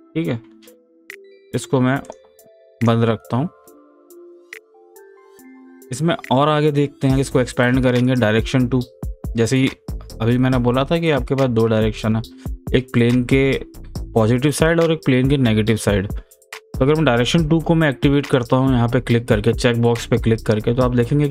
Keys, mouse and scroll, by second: 2.1 click, 8.0 click, 12.2-15.3 middle drag, 18.3 click.